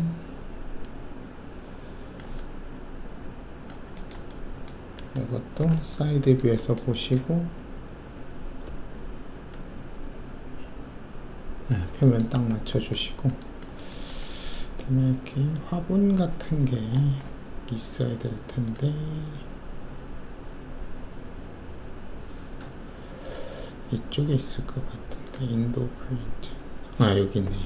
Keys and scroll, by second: 5.6 alt+shift+4, 8.6 alt+4, 12.5 alt+shift+q.